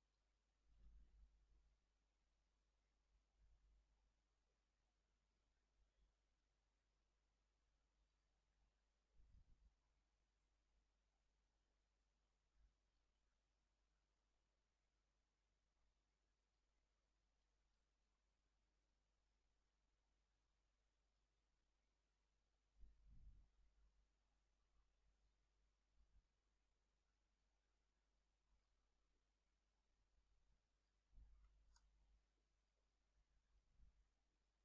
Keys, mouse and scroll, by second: 1.7 alt+Left, 5.3 click, 6.6-8.3 drag, 9.3 click, 10.7-13.2 ctrl+drag, 14.1-16.8 ctrl+drag, 17.5 ctrl+click, 18.0-18.8 ctrl+scroll up 3, 19.3-21.4 ctrl+drag, 21.6 ctrl+scroll down 2, 24.1 alt+Right, 27.1-28.9 drag, 29.9-30.2 ctrl+scroll down 2, 30.8 ctrl+shift+click, 31.8 ctrl+shift+KP_Add, 32.7-33.8 ctrl+drag.